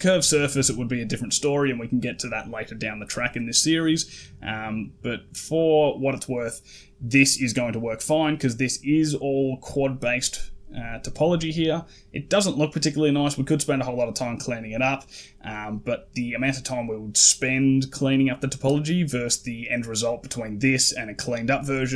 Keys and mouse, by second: 18.0 middle click.